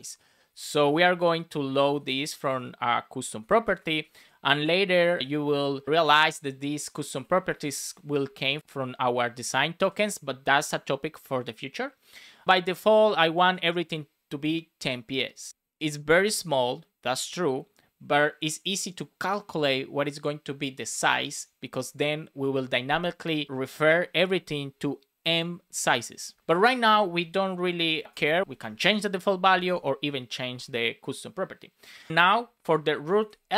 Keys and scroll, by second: 0.8 shift+o, 1.6 Left, 2.3 BackSpace, 3.8 BackSpace, 10.4 space, 13.1 Right, 27.7 Down, 28.0 Return, 28.4 Up, 28.5 super+Right, 29.2 Down, 32.5 shift+3, 33.5 space.